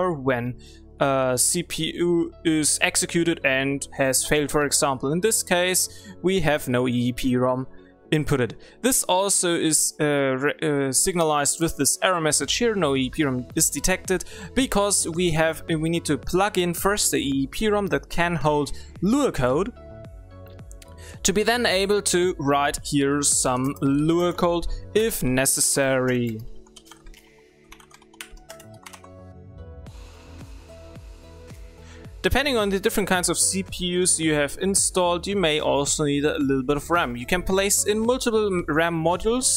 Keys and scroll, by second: 31.8 w.